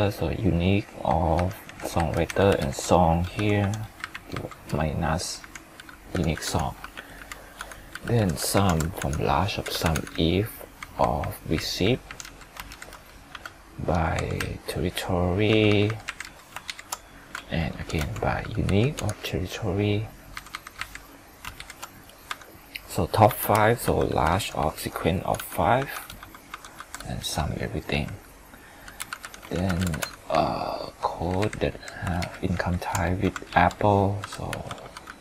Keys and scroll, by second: 2.6 ctrl+shift+Down, 12.7 ctrl+shift+Down, 32.2 ctrl+shift+Down.